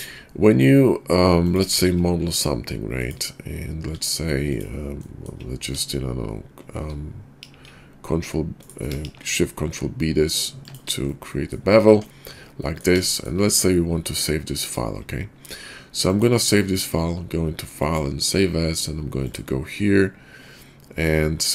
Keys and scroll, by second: 1.8 shift+a, 3.8 Tab, 7.4 ctrl+b, 9.0 ctrl+shift+b, 11.8 Tab.